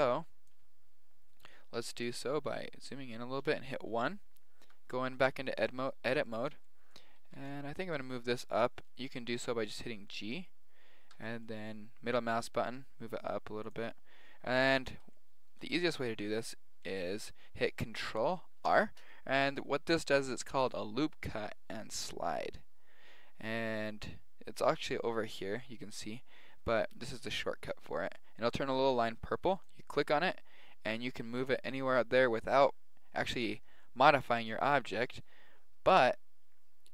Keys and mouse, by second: 1.4 click, 1.7-3.3 middle drag, 3.4 KP_1, 4.6 Tab, 7.1 a, 7.3 b, 7.9 g, 9.3 g, 11.1 g, 14.8-21.9 middle drag, 21.9 ctrl+r.